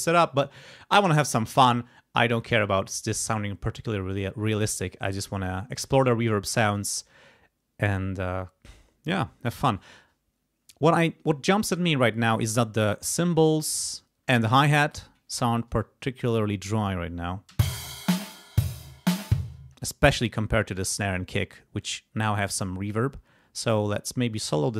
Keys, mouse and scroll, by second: 15.3 click, 17.5 space, 19.6 space, 22.2 click, 24.3 click.